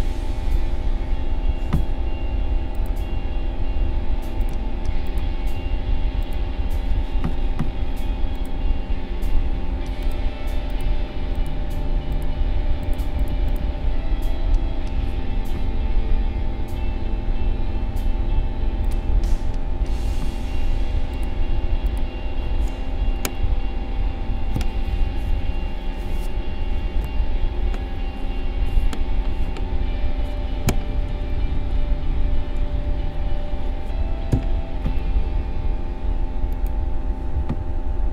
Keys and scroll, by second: 30.8 Right, 31.8 Up, 32.6 Left, 34.3 Down.